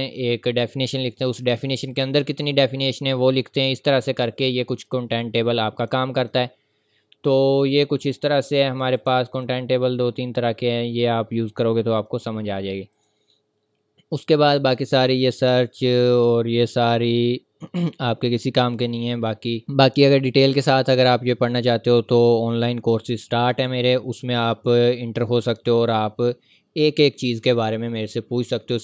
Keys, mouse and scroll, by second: 4.6-5.6 scroll up 1, 5.8 click, 10.3-10.9 scroll down 1, 10.9-11.9 scroll up 1, 12.9 click.